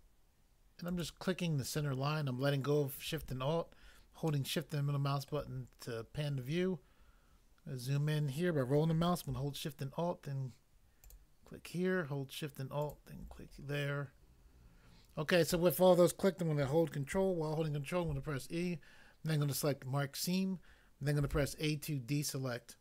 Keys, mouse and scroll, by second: 0.9 alt+click, 4.4 shift+middle click, 7.5-8.7 scroll up 1, 11.1 alt+click, 12.8 alt+click, 12.9 alt+click, 13.5 scroll down 1, 18.1 ctrl+e, 19.5 click, 19.6 click, 21.3 a.